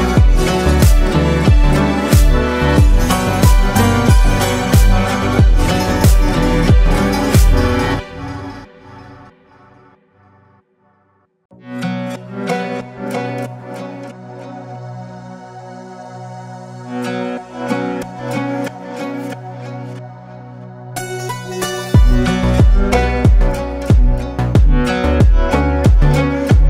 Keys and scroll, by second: 2.5 shift+space, 3.1 ctrl+shift+space, 11.9 shift+space, 12.5 ctrl+shift+space, 13.1 ctrl+shift+space, 19.7 ctrl+space, 22.5 shift+space, 23.3 ctrl+shift+space, 24.3 ctrl+shift+space.